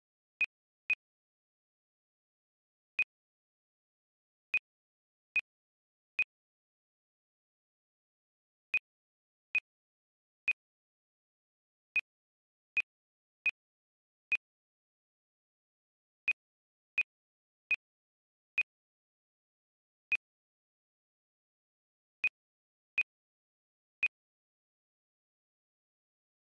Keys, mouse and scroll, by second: 0.9 double click, 1.6 ctrl+c, 1.7 typing, 3.0 click, 6.7 ctrl+v, 7.5 Return, 8.7 click, 11.3 ctrl+c, 11.3 typing, 11.9 click, 14.9 ctrl+v, 15.6 Return, 16.2 click, 19.3 ctrl+c, 20.1 click, 24.6 ctrl+v.